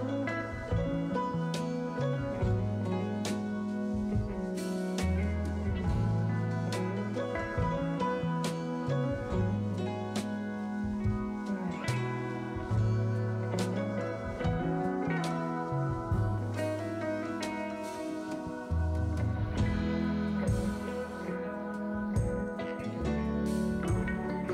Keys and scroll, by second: 0.2 s, 3.4 s, 4.9-5.7 typing, 16.3 s, 18.6 2.